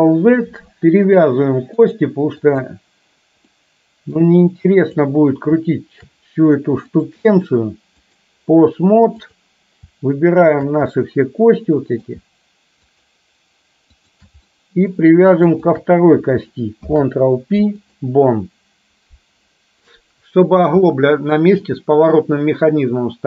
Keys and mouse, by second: 1.9-2.8 drag, 3.5 middle click, 5.0 click, 6.9-8.3 drag, 9.3 click, 10.5 shift+click, 11.0-12.3 middle drag, 12.9 shift+click, 14.0 shift+click, 14.5 middle click, 15.7 shift+click, 16.8 ctrl+p, 19.9-20.5 middle drag, 20.9-21.5 middle drag, 21.8-23.2 middle drag.